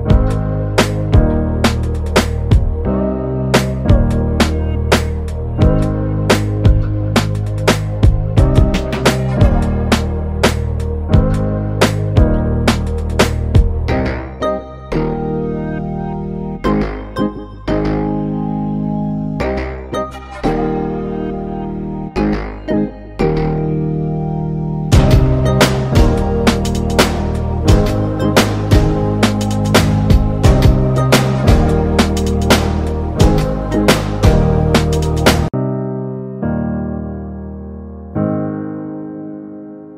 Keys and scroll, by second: 3.6 Delete.